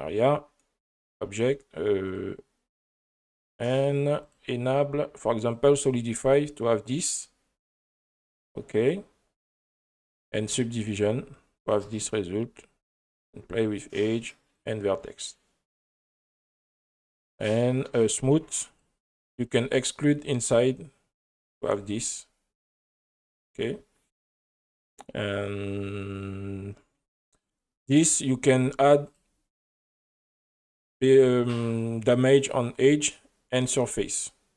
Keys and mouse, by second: 2.1 click, 4.2 drag, 5.5-9.9 drag, 10.9 click, 11.7 click, 13.1 click, 14.6-15.7 drag, 16.3 click, 18.2 click, 18.7 click, 19.3 click, 21.5 click, 21.8 click, 22.1 click, 22.7 click, 23.3-25.8 drag, 26.1 click, 29.2 click, 32.4 click.